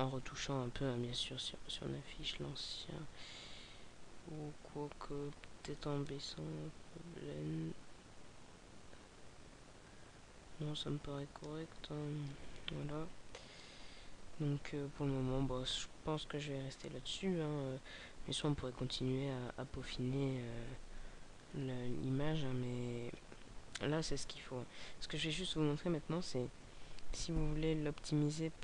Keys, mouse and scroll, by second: 13.6 Escape, 25.8 Escape, 27.5 click.